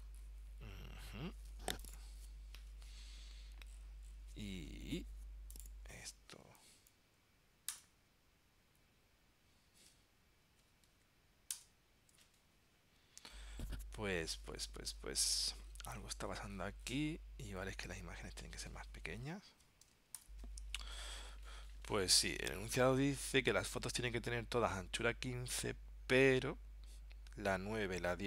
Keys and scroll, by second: 20.3 ctrl+alt+super+p.